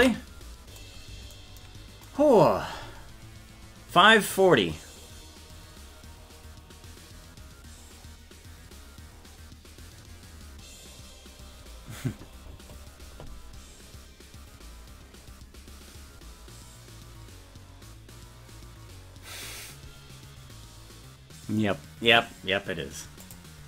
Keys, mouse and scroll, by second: 0.2 ctrl+s.